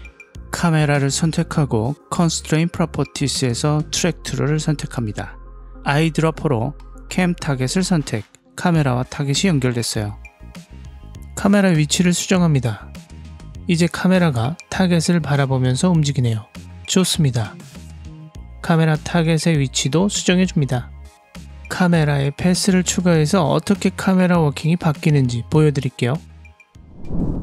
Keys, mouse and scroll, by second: 0.4 click, 1.0 click, 2.0 click, 3.1-5.3 drag, 6.0 click, 9.5 click, 10.8 click, 12.2 click, 13.2 g, 17.6 click, 18.7 click, 19.9 click, 22.0 click, 22.4 g, 26.0 click.